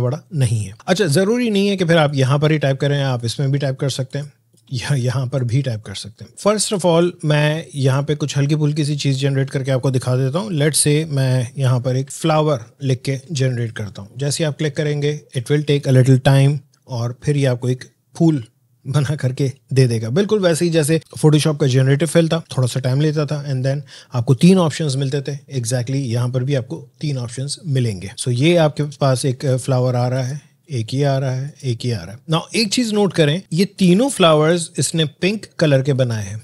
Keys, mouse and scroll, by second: 0.7 click, 13.0 typing, 13.5 click, 30.1 click.